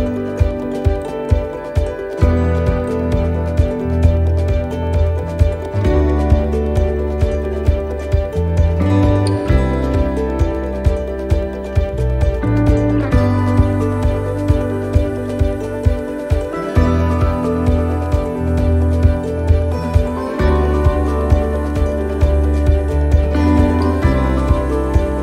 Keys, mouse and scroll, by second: 0.5 click, 2.1 middle click, 3.0 shift+middle click, 3.8 middle click, 4.5-5.1 scroll down 2, 6.2 middle click, 6.9 shift+middle click, 7.5 scroll up 3, 8.1 shift+middle click, 10.1 right click, 11.4 l, 13.9 shift+d, 15.3 click, 16.6 middle click, 17.4-18.0 scroll down 3, 18.4 click, 22.2 middle click, 23.9 click, 24.8 middle click.